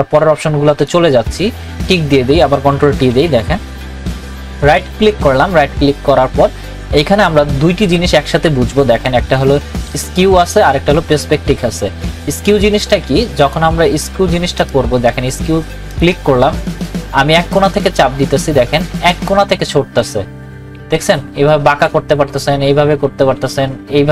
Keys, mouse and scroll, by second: 3.1 ctrl+t, 4.6 right click, 13.4 right click, 13.4 click, 14.6 right click, 15.9-24.1 drag.